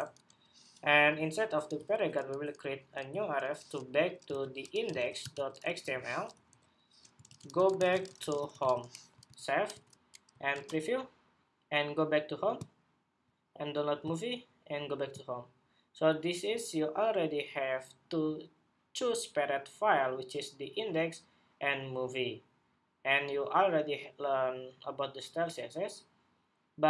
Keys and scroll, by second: 9.0 super+s, 9.6 super+Tab, 10.3 super+r.